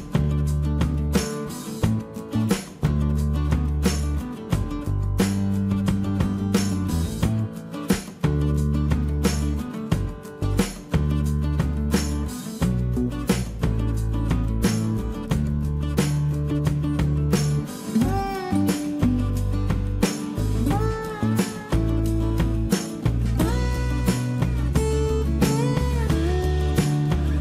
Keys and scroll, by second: 16.1 t.